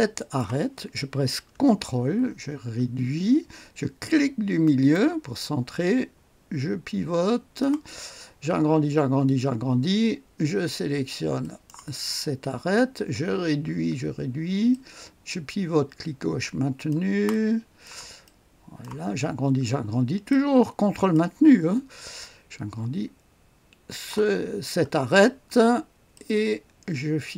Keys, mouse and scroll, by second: 0.2 click, 1.9-3.5 ctrl+scroll down 1, 4.6 ctrl+middle click, 5.4-8.3 ctrl+drag, 8.3-11.4 scroll up 3, 11.4 ctrl+click, 12.2-14.7 scroll down 1, 14.7-19.5 ctrl+drag, 19.3-20.3 scroll up 2, 20.3 ctrl+click, 22.3-23.9 scroll up 1, 23.9 ctrl+click, 24.4-26.1 ctrl+scroll down 2, 26.1-27.3 ctrl+drag.